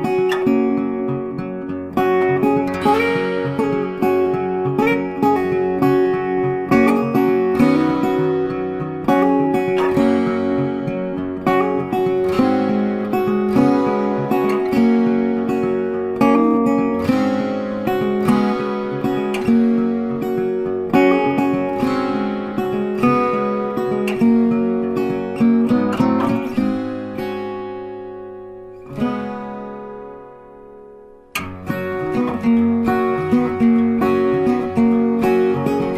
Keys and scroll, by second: 11.9 ctrl+t, 31.9 ctrl+t.